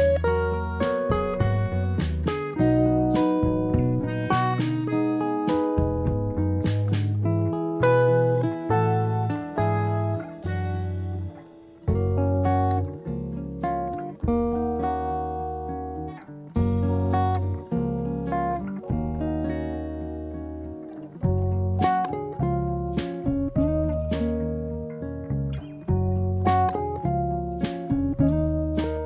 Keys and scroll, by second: 6.4 6, 6.7 0, 7.6 Return, 13.7 ctrl+=, 18.0 ctrl+-.